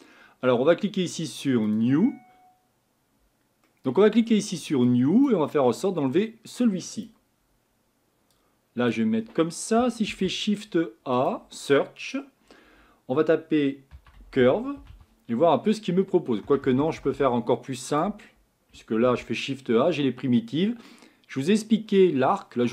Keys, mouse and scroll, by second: 1.7-7.0 drag.